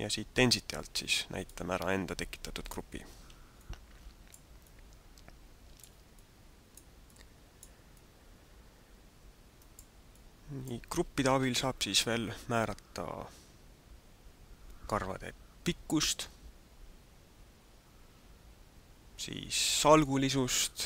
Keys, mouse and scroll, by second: 1.4 click, 3.5 middle click, 4.6 middle click, 6.2 middle click, 7.0 middle click, 8.0 middle click, 10.1 middle click.